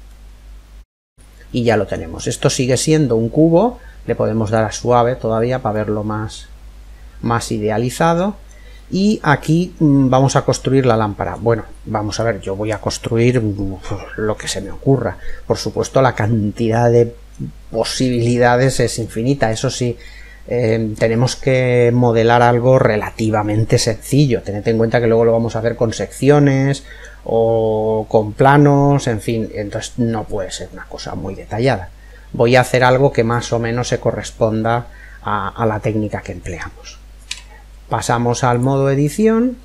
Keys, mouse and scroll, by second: 0.0-2.7 middle drag, 2.7-3.8 scroll up 1, 3.8 scroll up 1, 4.0 click, 4.9-5.3 scroll down 1, 5.3-7.2 middle drag, 8.2-10.7 middle drag, 11.2-13.3 scroll up 1, 13.3 scroll up 1, 13.5-14.1 scroll down 1, 14.8-16.7 middle drag, 17.2-21.6 middle drag, 17.6-18.6 scroll up 1, 23.2-25.1 middle drag, 28.9-30.8 middle drag, 36.8 Tab, 38.6 middle click.